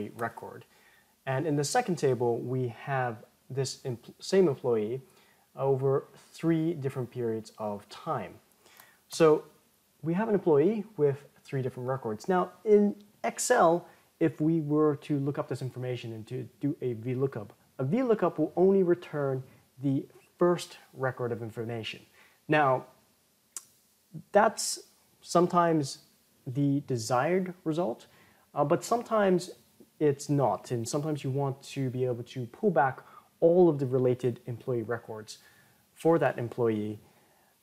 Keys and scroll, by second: 0.1 ctrl+Return, 8.8 ctrl+Return.